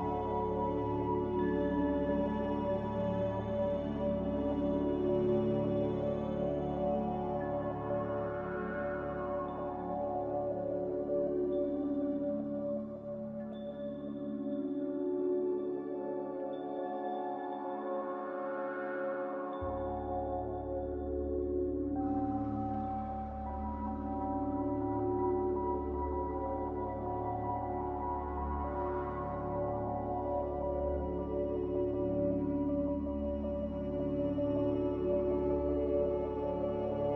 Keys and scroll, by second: 10.3 1, 10.4 0, 10.7 Return, 14.5 Escape, 17.6 typing, 22.3 g, 24.1 typing, 24.3 Return, 27.7 z, 33.8 s, 34.8-35.3 typing.